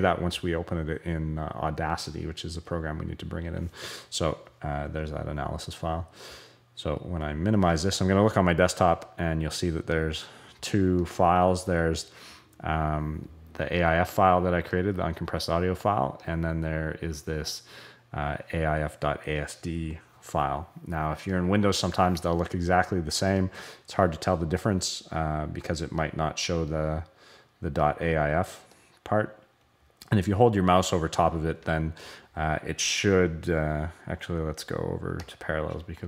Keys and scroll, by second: 7.3 super+h.